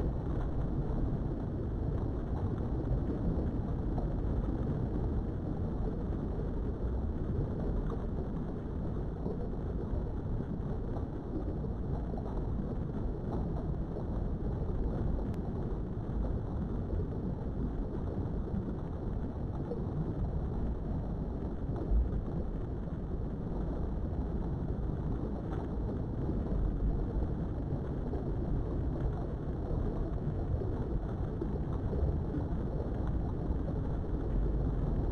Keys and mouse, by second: 1.8 shift+click, 2.8 KP_3, 5.5 e, 6.7 click, 7.1-9.5 middle drag, 10.7 s, 11.4 right click, 11.9 s, 12.2 x, 25.5 right click, 26.2-26.8 typing, 28.1 KP_Enter, 29.3 Tab, 29.7-31.3 middle drag, 31.7 KP_3, 33.2 click, 34.1 Tab.